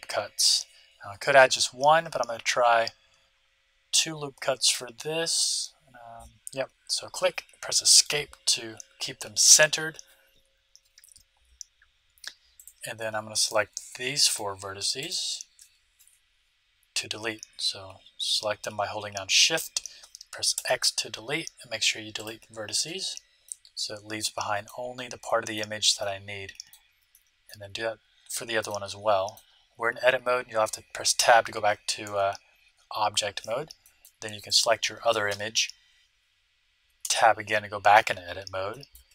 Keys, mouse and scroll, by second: 12.5-16.7 right drag, 20.6 x, 23.4-30.5 middle drag, 31.1 Tab, 32.0 Tab, 33.8-35.6 middle drag, 34.4-36.0 right drag, 37.0 Tab, 37.4-39.1 middle drag.